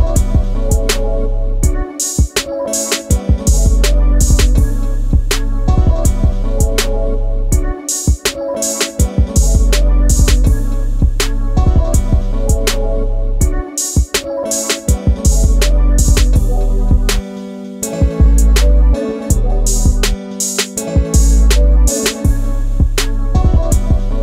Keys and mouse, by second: 2.1 click, 2.1 e, 3.8 e, 4.4 click, 4.6 e, 5.8 right click, 6.5 click, 7.6 e, 8.1 right click, 8.6 ctrl+z, 8.8 ctrl+z, 10.1 g, 12.7 click, 13.3 e, 13.9 click, 14.3-18.6 typing, 14.7 click, 15.1 click, 16.3 click, 16.9 click, 17.5 click, 18.0 click, 18.4 click, 18.9 click, 19.9 click, 21.0 click, 22.2 click, 23.4 click.